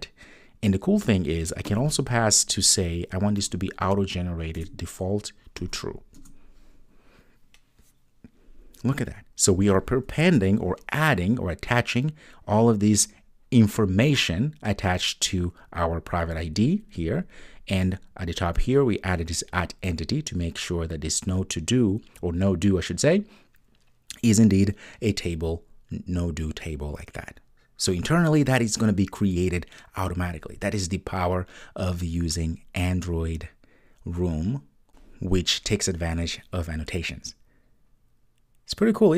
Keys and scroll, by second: 4.6 Return.